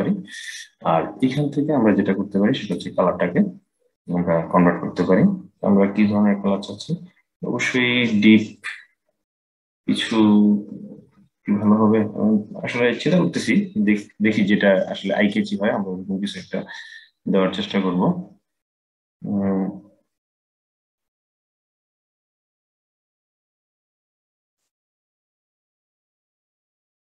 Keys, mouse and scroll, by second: 0.9 click, 24.2 click.